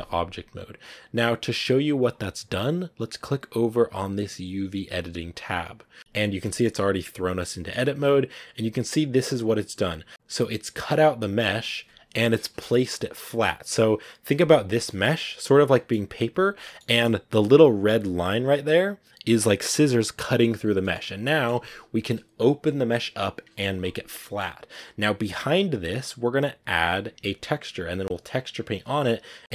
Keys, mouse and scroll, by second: 5.2 click, 6.0-6.3 scroll up 6, 6.3 middle click, 7.2 scroll up 1, 7.3 middle click, 7.8-10.1 scroll up 2, 10.1-16.8 middle drag, 16.8-19.4 scroll up 3, 16.8 middle click, 19.4-20.3 scroll up 1, 20.5 scroll down 3, 20.7-29.5 middle drag.